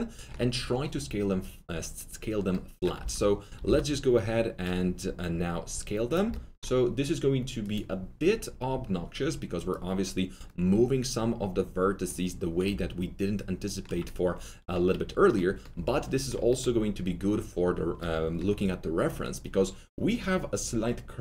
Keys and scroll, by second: 2.9 alt+r, 3.6 alt+g.